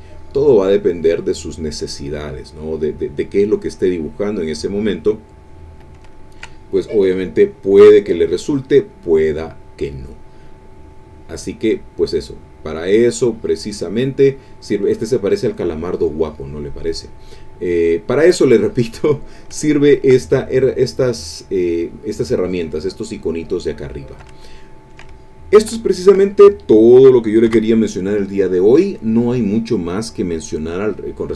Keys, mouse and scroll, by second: 0.1-3.0 drag, 3.9 click, 4.9 click, 5.4 click, 6.1 ctrl+click, 6.7 ctrl+click, 7.3 shift+click, 8.0 shift+click, 8.3 shift+middle click, 10.7 click, 11.5-12.6 drag, 12.6-13.8 drag, 15.1-16.8 drag, 16.8-18.2 middle drag, 18.2 click, 19.6 ctrl+click, 20.6-21.8 drag, 23.1 click, 24.4 ctrl+shift+middle click, 25.2-26.3 ctrl+shift+drag, 26.3 ctrl+shift+middle click, 27.5 5.